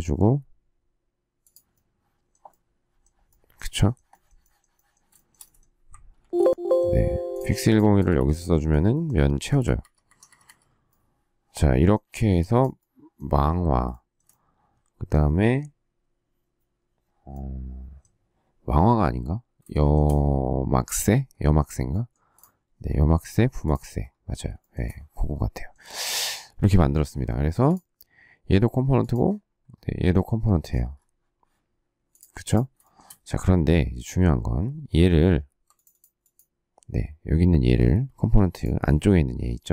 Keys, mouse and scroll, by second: 5.1 shift+middle click, 6.1 ctrl+f, 7.9 space, 8.0 Escape, 9.3 space, 9.4 Escape, 9.7 Escape, 12.0 shift+middle click, 13.8 shift+middle click, 19.7 shift+middle click, 24.5 shift+middle click, 32.7 shift+middle click, 32.9 shift+double middle click.